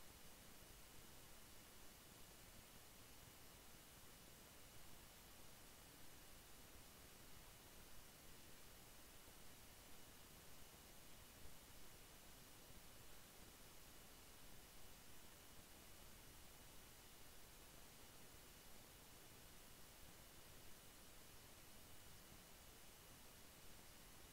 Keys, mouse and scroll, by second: 0.3-1.1 typing, 2.4-3.1 typing, 3.7-5.2 drag, 5.2 ctrl+g, 6.0-8.7 drag, 8.7-9.3 scroll up 1, 10.1 Down, 10.6 Left, 12.9 click, 15.2-18.2 drag, 18.2 ctrl+z, 20.6-24.3 drag.